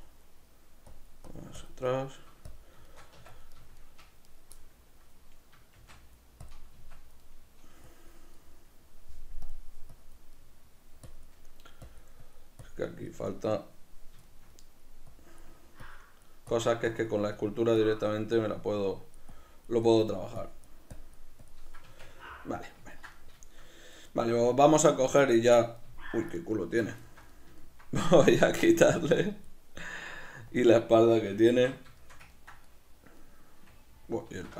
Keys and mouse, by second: 0.2 middle click, 0.9 click, 2.0 middle click, 2.5 click, 2.8-4.3 shift+middle drag, 3.2 b, 3.2 Tab, 4.3-5.8 right drag, 5.8 middle click, 5.8 shift+d, 6.5 click, 6.8 Tab, 6.9 b, 7.2 middle click, 7.9 click, 8.4-9.4 middle drag, 9.4 click, 10.4 middle click, 11.1 click, 11.5 middle click, 11.8 click, 13.3-15.1 middle drag, 15.1 click, 21.8 b, 22.0 Tab, 22.0 click, 22.2-26.4 middle drag, 26.4 right click, 26.6 Tab, 27.0-28.4 shift+middle drag, 28.4 click, 30.1 middle click, 30.5 click, 31.5 q, 32.0-34.3 ctrl+shift+middle drag, 34.3 q.